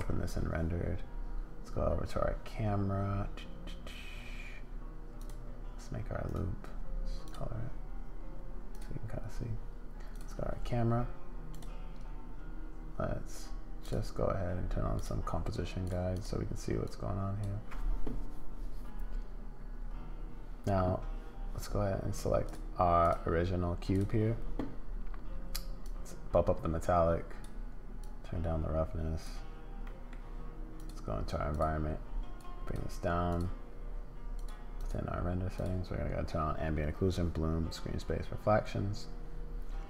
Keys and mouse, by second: 5.2 click, 6.3-7.4 drag, 8.7 click, 11.5 click, 13.9 click, 15.0 click, 15.8 click, 16.1 click, 16.9 click, 25.8-27.4 drag, 28.0-29.3 drag, 29.9 middle click, 30.7 click, 33.3 click, 34.4 click, 34.8 click, 35.6 click.